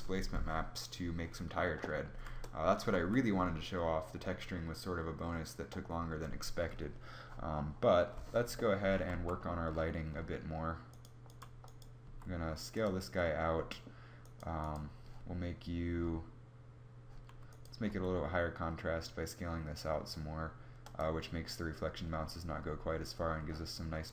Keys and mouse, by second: 1.8 KP_0, 2.0 KP_0, 2.5 z, 8.6 z, 11.5 s, 13.7 right click, 17.4 s, 17.4 s.